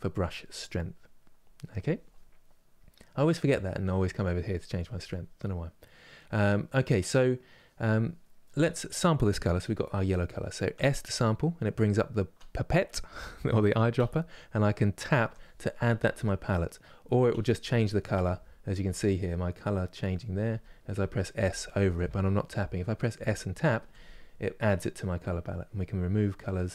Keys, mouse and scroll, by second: 3.6-26.7 drag.